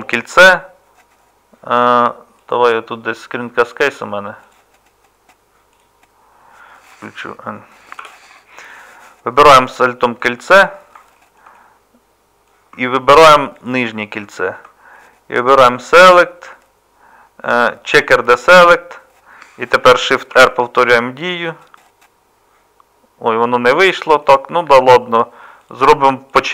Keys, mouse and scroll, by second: 8.0 n, 20.4 shift+r.